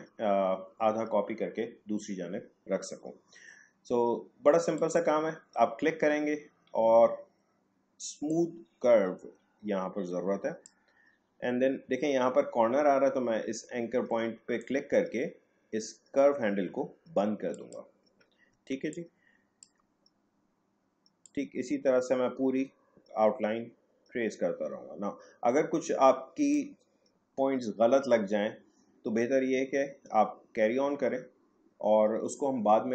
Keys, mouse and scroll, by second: 4.7 click, 8.3-13.1 drag, 17.5 click, 18.5 space, 18.9 click, 19.0 space, 21.2-28.9 drag.